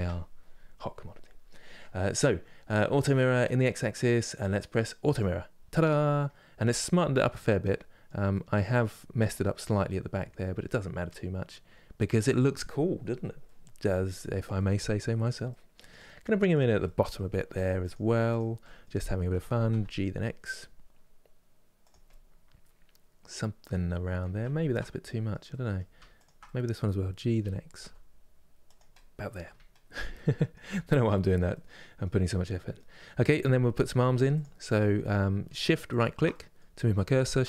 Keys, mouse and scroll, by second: 5.7-11.0 middle drag, 13.1-16.2 middle drag, 16.2 click, 16.5 middle click, 17.1 3, 17.5 click, 18.0 click, 18.3 middle click, 19.0 g, 21.7-24.3 middle drag, 24.3 ctrl+z, 24.8-25.9 middle drag, 25.9 shift+click, 26.1-27.1 middle drag, 27.1 g, 28.6 middle click, 29.1 Tab, 29.5-30.4 scroll down 1, 30.4-35.5 middle drag, 35.5 shift+right click, 36.0-37.4 middle drag.